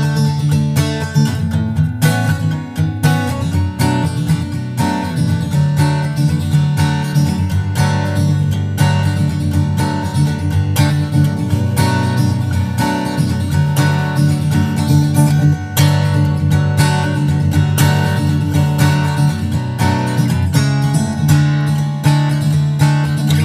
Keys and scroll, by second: 0.5 super+Tab, 3.1 super+c, 3.2 super+Tab, 3.8 super+v, 4.1 super+Right, 4.4 super+s, 8.1 super+s, 8.6 super+Tab, 9.9 super+Tab, 20.0 super+s, 21.8 super+Tab, 23.0 super+Tab.